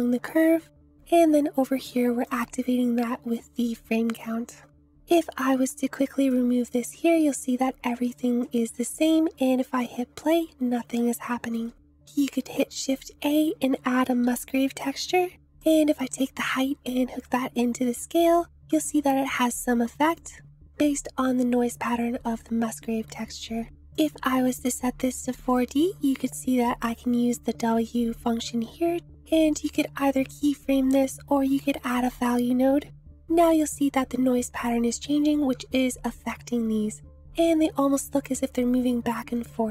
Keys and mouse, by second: 0.0 Right, 2.3-4.2 drag, 5.0 ctrl+s, 5.8 click, 8.7 space, 10.9-11.6 shift+middle drag, 12.0 space, 12.0 shift+a, 15.6-18.2 drag, 20.2 click, 20.7-23.1 drag, 24.0-25.5 drag, 26.9-29.0 drag, 31.0 click, 31.5 shift+a.